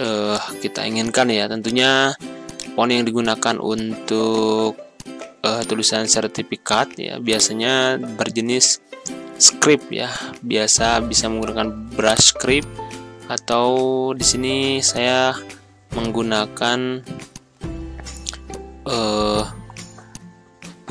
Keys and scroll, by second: 7.9 ctrl+a, 9.2 ctrl+v, 14.0 8, 14.1 0, 14.2 Return, 20.5 2, 20.7 6.